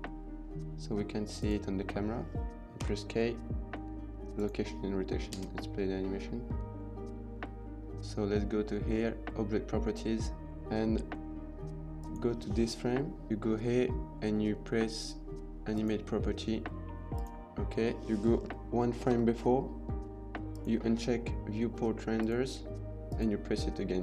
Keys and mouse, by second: 2.7 k, 5.3 space, 11.8 click, 15.7 click, 17.0 click, 19.2 Left, 20.3 click, 23.0 click.